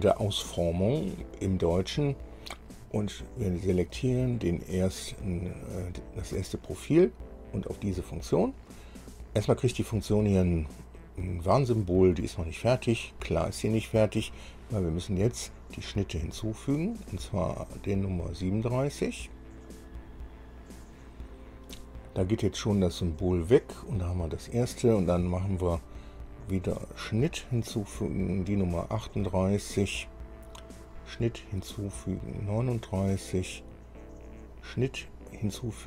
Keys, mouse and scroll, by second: 4.2 click, 8.1 click, 9.8 scroll down 1, 16.0 click, 20.1 click, 27.3 click, 28.7 click, 31.3 click, 32.6 click, 34.8 click.